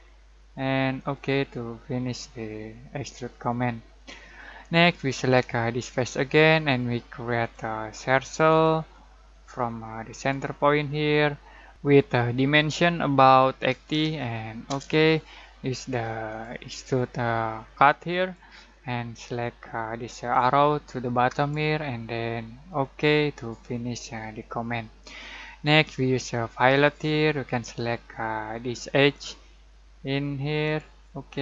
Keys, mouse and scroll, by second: 3.5-5.2 scroll down 1, 13.9 typing, 14.6 Return, 16.2-23.1 drag, 24.2 scroll down 1, 26.4 scroll up 1, 26.7 click, 29.1 click.